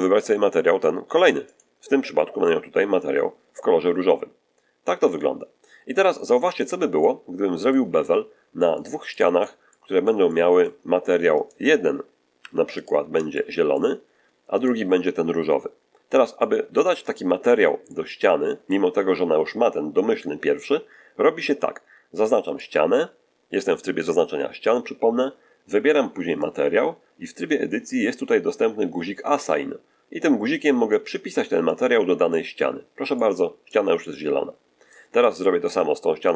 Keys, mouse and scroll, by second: 1.4 click, 6.9 middle click, 7.9 middle click, 9.0 shift+middle click, 11.3 shift+right click, 12.3 3, 12.7 right click, 13.2 shift+middle click, 14.5 shift+right click, 16.3 middle click, 17.0 shift+middle click, 17.7-18.8 shift+middle drag, 22.4 right click, 26.3 click, 31.6 click, 32.9 scroll down 1, 33.0 middle click, 33.9-35.0 middle drag, 35.1 middle click, 36.2 right click.